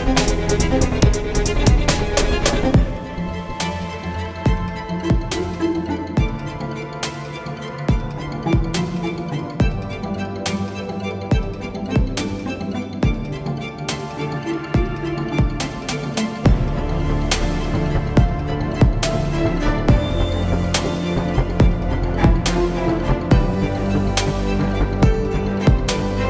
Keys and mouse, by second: 3.7 x, 5.1 KP_7, 6.4 z, 7.0 shift+a, 8.6 t, 9.8-13.2 drag, 14.2 t, 15.0 s, 16.6 s, 18.4 Tab, 19.9 shift+d, 22.2 KP_3, 23.2 a, 23.4 a, 23.8 s.